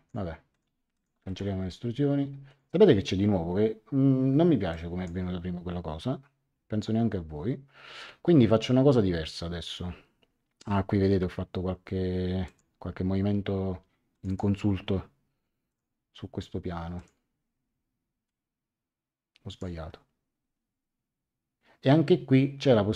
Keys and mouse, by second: 0.9 shift+click, 1.2 right click, 2.4 click, 4.7 click, 12.4 click, 14.1 click, 15.7 click, 16.9 click, 18.2 click.